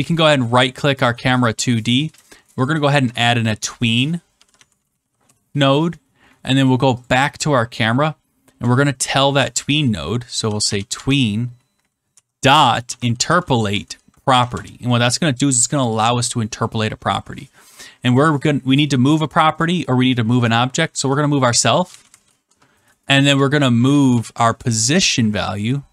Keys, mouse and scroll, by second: 0.2 right click, 1.0 click, 1.8 right click, 2.6 click, 4.2-5.4 typing, 7.0 click, 8.2 middle click, 9.2-10.9 typing, 12.0-13.8 typing, 13.9 Down, 14.1 Down, 14.4 Return, 21.4-24.5 typing, 25.6-25.9 typing.